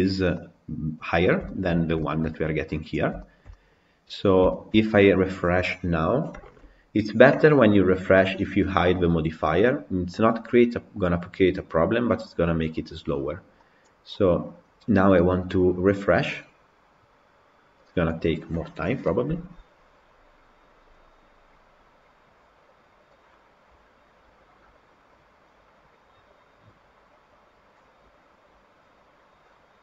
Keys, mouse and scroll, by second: 0.0 scroll down 1, 0.2-1.0 middle drag, 1.0 scroll down 3, 1.3 shift+middle click, 1.9 shift+middle click, 2.8 click, 3.1-3.9 shift+middle drag, 3.9-4.4 scroll up 1, 4.4-13.6 shift+middle drag, 13.6 click, 14.1-29.8 middle drag.